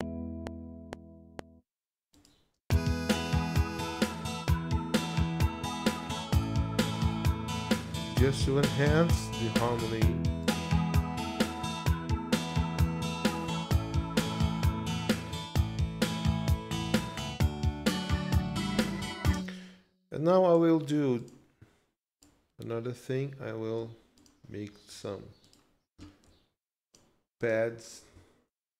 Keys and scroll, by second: 1.5 space, 11.5 ctrl+s, 19.3 space.